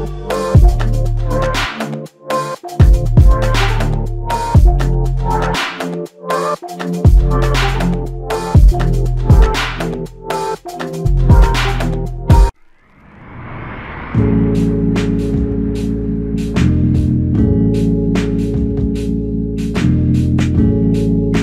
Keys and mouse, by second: 0.3 alt+click, 3.7 f, 5.0 ctrl+alt+click, 6.5 double click, 11.5 ctrl+alt+click, 12.7 ctrl+click, 17.2 shift+click, 17.6 shift+double click, 18.0 shift+click, 20.5 shift+click, 21.0 shift+click.